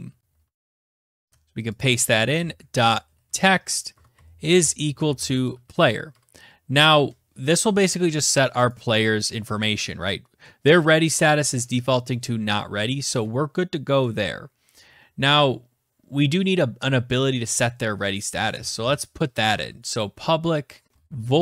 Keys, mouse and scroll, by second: 0.5 click, 1.1-5.6 typing, 2.6 Tab, 7.3 click, 10.1 Return, 10.2 Return, 16.8-21.4 typing.